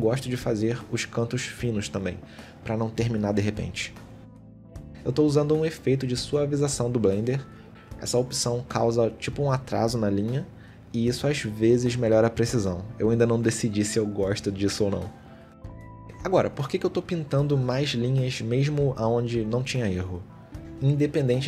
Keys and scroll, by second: 1.2 ctrl+z, 2.6 ctrl+z, 4.2 ctrl+z, 5.4 shift+x, 6.2 shift+x, 6.7 ctrl+z, 7.3 shift+x, 8.2 shift+x, 8.4 shift+x, 11.3 ctrl+z, 11.8 ctrl+z, 12.8 shift+x, 15.1 shift+x, 15.6 ctrl+z, 16.3 shift+x, 18.3 shift+x, 19.6 ctrl+z, 20.6 shift+x, 21.0 ctrl+z.